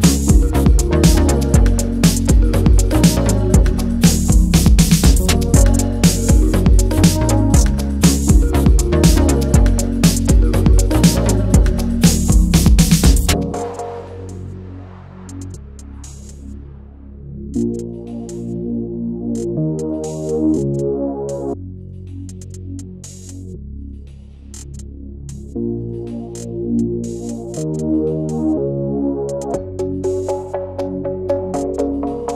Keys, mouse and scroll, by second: 0.0-4.5 typing, 5.2 click, 7.0 alt+click, 8.5 click, 9.8-11.1 typing, 12.6-14.4 typing, 14.8 click, 18.4-19.9 typing, 20.0 Return, 22.7 click, 23.4-25.2 typing, 27.8 click, 31.1 ctrl+a.